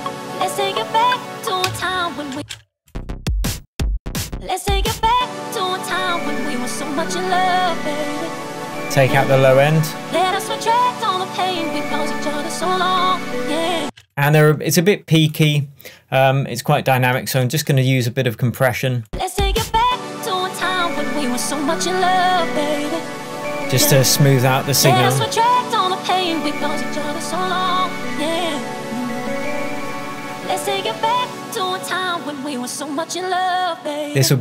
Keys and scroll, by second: 1.7 k, 13.9 space.